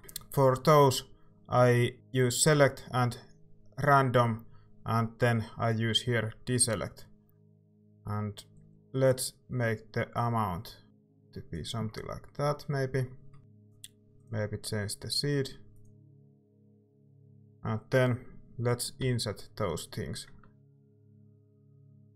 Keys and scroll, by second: 19.0 i.